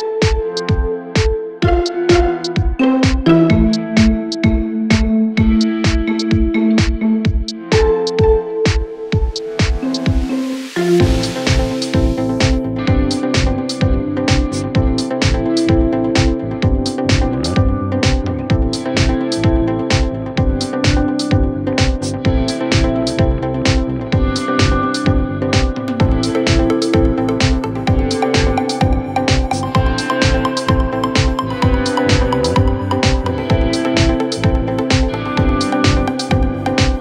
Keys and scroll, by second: 27.1 Down.